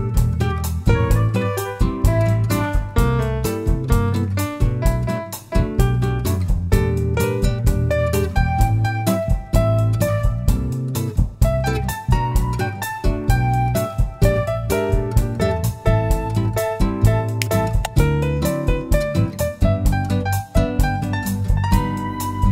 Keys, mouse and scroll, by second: 0.8 click, 2.3 ctrl+r, 4.9 click, 5.2 ctrl+r, 7.7 click, 7.8-9.9 middle drag, 7.9 scroll down 1, 8.5 Tab, 9.9-11.0 right drag, 11.0-19.1 middle drag, 13.6 /, 14.6-15.1 scroll down 1, 15.6 scroll down 1, 18.5-19.1 scroll down 1, 19.1 click, 21.4 click.